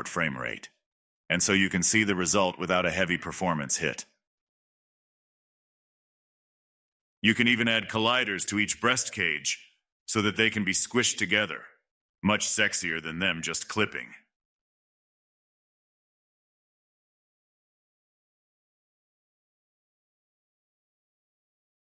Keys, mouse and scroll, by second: 1.7 click, 1.8 scroll up 3, 1.8 middle drag, 1.9 space, 2.2-2.9 middle drag, 3.5 right click, 3.9 middle click, 3.9 space, 4.0 right click, 4.3 click, 4.4 click, 4.5 middle click, 5.5 middle click, 5.9 scroll down 2, 6.0-7.8 middle drag, 7.8 scroll up 2, 8.1 shift+middle drag, 8.3 click, 8.7 click, 9.5-10.2 drag, 10.5 space, 13.1-13.8 scroll up 2, 15.3 space, 16.1 click, 16.7-17.9 drag, 17.9-18.7 scroll down 13, 18.7-19.4 scroll up 94, 19.4-19.8 drag, 19.8-20.2 scroll down 2, 20.2 click, 21.4 click.